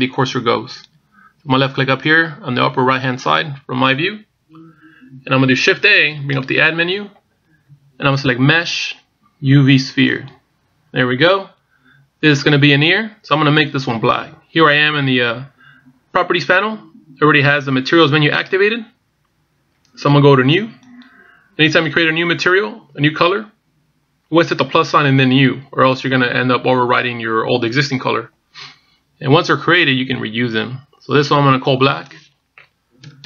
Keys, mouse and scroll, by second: 0.1 click, 0.5 click, 1.0 click, 1.6 click, 2.9 click, 6.8 shift+a, 21.5 click, 32.5 click.